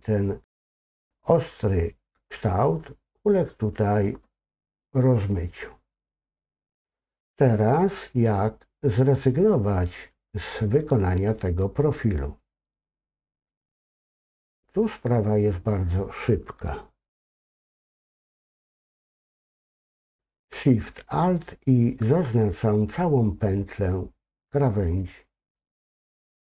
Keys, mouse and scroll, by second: 13.5 click, 25.6 alt+shift+click.